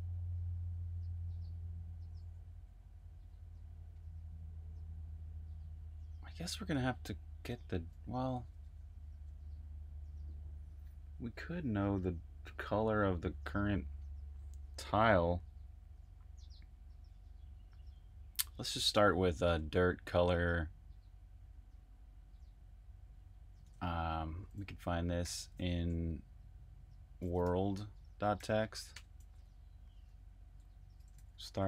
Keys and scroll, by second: 23.6 super+`, 24.9-25.8 typing, 26.9-31.6 typing.